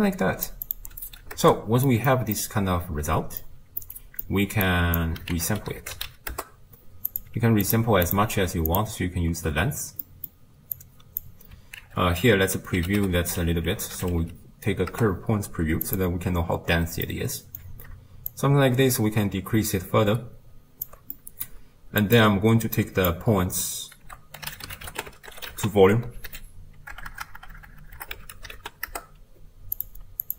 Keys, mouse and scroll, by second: 2.4-4.7 middle drag, 4.7-6.3 drag, 6.3 ctrl+a, 7.8 click, 8.8-14.9 drag, 16.7-17.1 scroll up 3, 17.1-18.4 middle drag, 18.4-22.2 shift+drag, 22.8-28.9 drag, 28.9 BackSpace, 30.2 click.